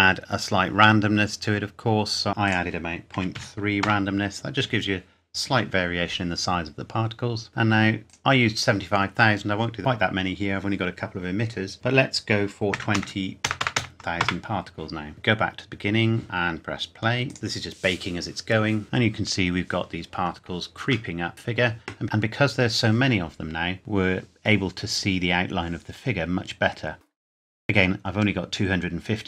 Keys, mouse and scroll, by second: 2.5 click, 3.2 KP_Decimal, 3.4 KP_3, 3.9 KP_Enter, 7.5-8.1 scroll up 1, 8.1 click, 12.7 KP_2, 13.0 KP_0, 14.2 KP_Enter, 15.1 click, 20.9 shift+Num_Lock, 21.1 shift+middle click, 21.8 scroll up 1.